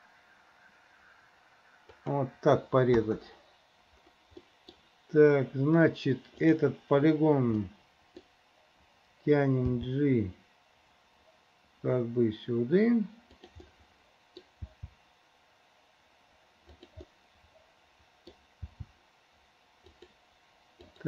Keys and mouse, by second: 4.5 middle click, 6.5 middle click, 7.8 middle click, 9.8 g, 13.8 middle click, 14.8 g, 17.2-18.5 drag, 18.8 g, 20.9 middle click.